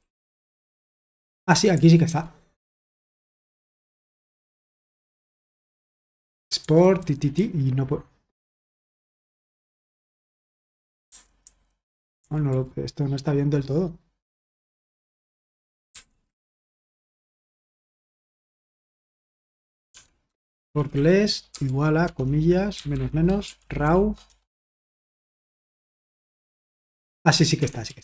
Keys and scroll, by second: 0.0-2.2 typing, 1.4 Escape, 4.4-4.7 typing, 7.1-7.8 typing, 11.0-12.5 typing, 15.9-17.9 typing, 19.9-26.0 typing, 27.5 Escape, 27.6-28.0 typing.